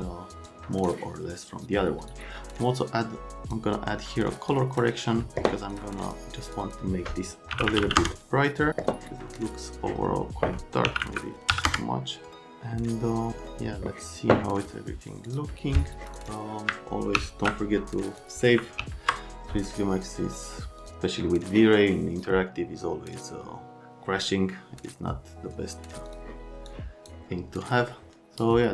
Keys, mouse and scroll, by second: 0.5 click, 2.1 click, 4.5 click, 5.7 click, 6.0 click, 6.5 click, 6.6 click, 7.5 KP_1, 7.7 KP_Decimal, 7.8 KP_5, 8.0 KP_Enter, 10.9 KP_1, 11.0 KP_Decimal, 11.5 KP_3, 11.7 KP_Enter, 17.2 s, 18.8 s, 26.1 click, 26.7 click, 27.9 right click.